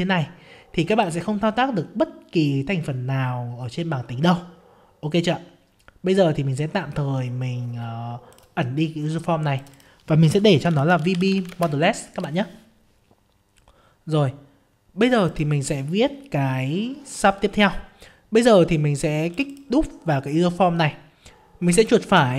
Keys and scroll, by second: 11.5 ctrl+space.